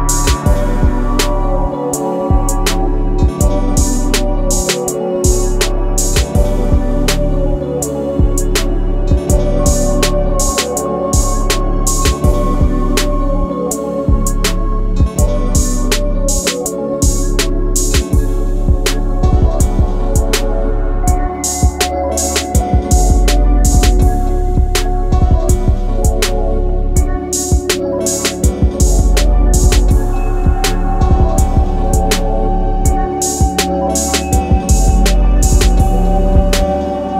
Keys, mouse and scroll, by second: 4.8-5.6 scroll down 1, 5.6 scroll up 1, 6.3 right click, 6.8-7.6 scroll up 1, 7.6 click, 8.0 scroll down 1, 8.5 scroll up 1, 10.9 scroll down 1, 11.5-13.0 typing, 13.8 Return, 15.4 click, 16.9 scroll up 1, 18.4 scroll down 1, 20.8 click, 22.8 scroll up 1, 22.8 typing, 23.0 scroll down 1, 23.5-24.4 scroll up 1, 24.4 click, 24.8 scroll down 1, 26.0 scroll up 1, 26.3 scroll down 1, 28.0 click, 28.4-28.7 scroll down 1, 29.5 shift+right click, 31.5-32.4 scroll up 1, 32.4 right click, 32.4 typing, 33.5 scroll up 1, 36.5 click.